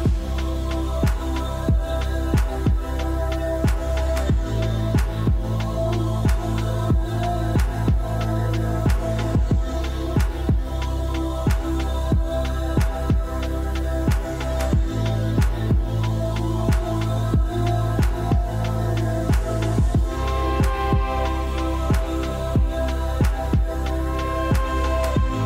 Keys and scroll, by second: 0.0-1.6 typing, 9.0 1, 9.1 Return, 13.7 typing, 16.0 r, 21.2-23.2 typing.